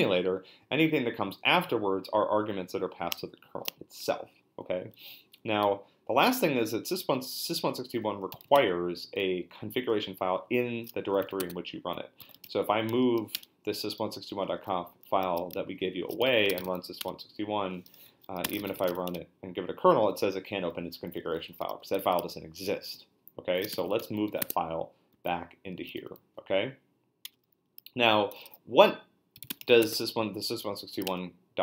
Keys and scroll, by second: 8.1-8.9 typing, 11.1-12.4 typing, 13.3 Return, 16.0-17.1 typing, 18.2-19.4 typing, 23.3-25.1 typing, 27.2 Return, 28.3-30.3 typing, 31.1 Return.